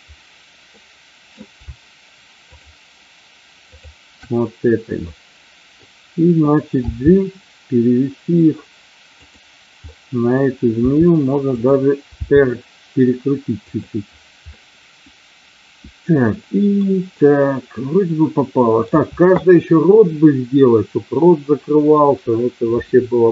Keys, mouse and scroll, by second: 0.9 middle click, 3.6 shift+click, 5.1 middle click, 6.7 g, 9.2 click, 9.8 middle click, 10.8 r, 11.5 click, 12.0 g, 14.5-16.9 middle drag, 17.2-17.9 scroll up 1, 17.9-19.0 middle drag.